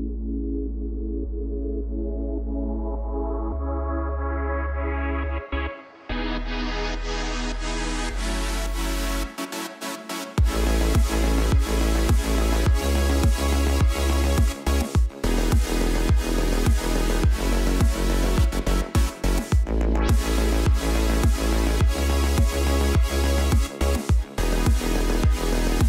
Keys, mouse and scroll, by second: 0.0-12.0 typing, 0.7 scroll down 4, 0.9 shift+middle click, 0.9 scroll up 4, 2.5 shift+middle click, 2.5 shift+scroll up 1, 3.4 shift+middle click, 5.1 shift+middle click, 5.9 click, 6.2 click, 7.1 click, 7.8 click, 7.9 click, 8.9 click, 10.1 click, 10.4 click, 11.3 shift+middle click, 11.4 click, 12.0 click, 12.9 click, 13.0 scroll down 3, 13.1 shift+middle click, 13.1-25.8 typing, 13.5 click, 14.1 scroll up 3, 15.8 click, 16.3 click, 16.4 shift+middle click, 16.5 scroll down 2, 16.9 scroll up 3, 17.4 click, 17.7 click, 18.4 click, 19.1 click, 19.4 click, 19.5 scroll down 1, 19.6 shift+middle click, 21.4 click, 21.7 click, 21.8 scroll up 3, 21.8 shift+middle click, 24.2 click, 24.6 click, 24.8 click, 25.2 click.